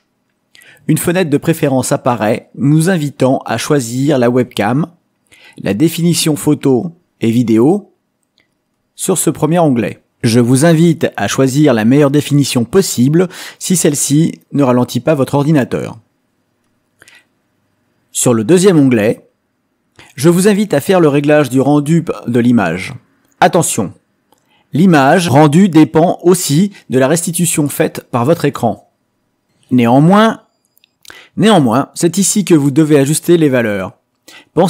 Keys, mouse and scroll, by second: 0.1 click, 2.4 click, 4.3 click, 5.2 click, 7.4 click, 14.9 click, 19.0-20.7 drag, 24.2-28.8 drag, 30.0-34.6 drag.